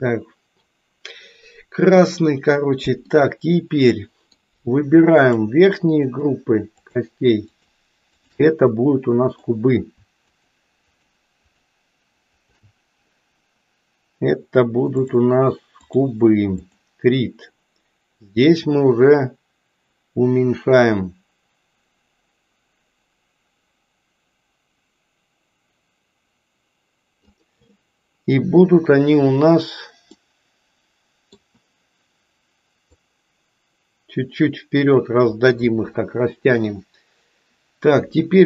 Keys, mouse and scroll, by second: 3.1-4.5 middle drag, 5.1 click, 6.1 shift+click, 6.7 shift+click, 7.5 shift+click, 8.2 shift+click, 8.7 middle click, 10.2 shift+click, 11.0 shift+click, 11.6 shift+click, 15.0-16.1 drag, 16.6 click, 18.3-27.1 drag, 30.1-31.4 middle drag, 32.8-34.8 drag.